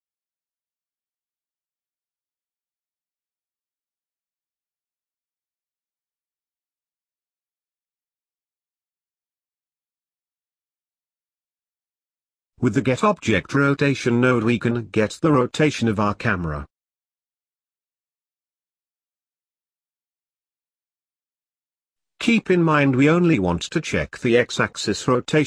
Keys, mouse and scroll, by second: 1.1 click, 2.5 click, 3.0 scroll up 3, 3.3-5.6 middle drag, 5.6-6.2 scroll up 1, 6.3 click, 7.0 scroll down 3, 7.3 middle click, 8.1 click, 8.8 click, 9.4-11.2 middle drag, 11.2 shift+a, 20.2-23.0 drag, 23.7 click.